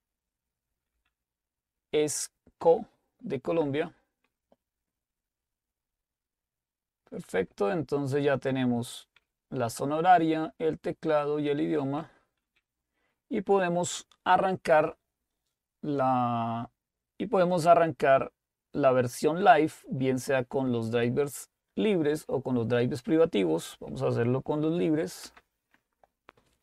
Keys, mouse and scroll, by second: 0.8 Down, 0.9 Down, 3.7 Return, 7.2 Up, 7.4 Up, 7.6 typing, 10.1 Down, 11.0-13.3 typing, 14.8-15.5 typing, 19.3 Down, 20.0 Down, 20.0 Up, 22.2 Down, 23.7 Down, 23.7 Up, 25.2 Return.